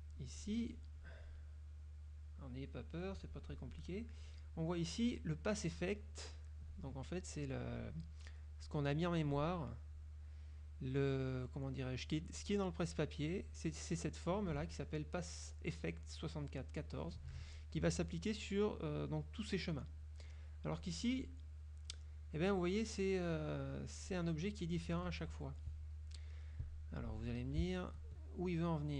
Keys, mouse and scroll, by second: 0.5 click, 3.1 click, 8.7 click, 10.1 click, 11.3 click, 12.5 click, 13.5 click, 20.9 click, 22.0 click, 24.2 click, 24.7 click, 25.4 F1, 25.7-26.5 drag, 27.0 click, 27.6 shift+click, 28.1 shift+click, 28.5 shift+click.